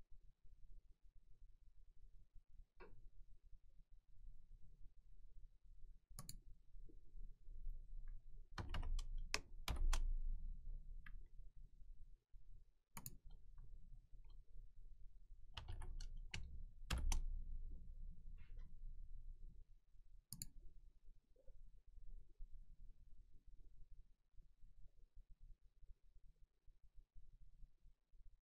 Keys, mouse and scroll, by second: 6.3 click, 8.3-9.7 typing, 13.0 click, 15.3-16.9 typing, 20.4 click.